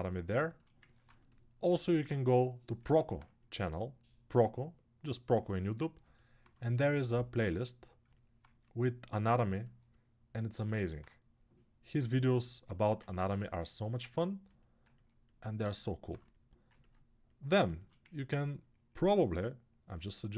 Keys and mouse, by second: 0.3-10.7 ctrl+alt+shift+drag, 10.7-12.2 right drag, 12.2-20.3 alt+shift+drag.